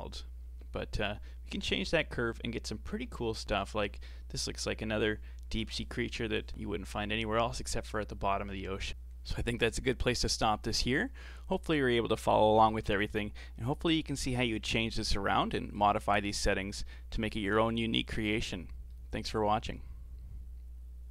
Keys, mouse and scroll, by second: 0.7 middle click, 1.3 scroll up 2, 1.6-6.9 middle drag, 6.9-7.4 scroll down 1, 7.4-8.9 middle drag, 9.5-13.4 middle drag, 13.4 scroll down 5, 13.9-15.1 middle drag, 15.1-15.5 scroll down 4, 15.5 middle click, 16.4 click, 18.4-18.9 scroll down 5, 18.9-21.1 middle drag.